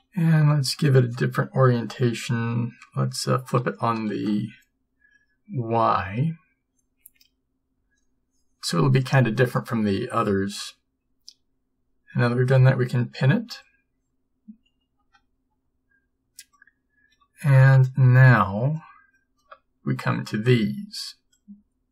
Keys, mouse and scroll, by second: 4.2 ctrl+m, 13.6 p, 15.1 a.